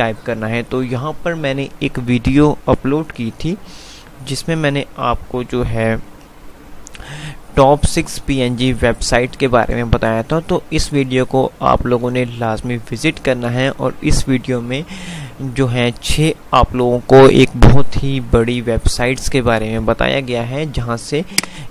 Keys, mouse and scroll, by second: 9.3 F5, 14.0 F5, 21.5 click.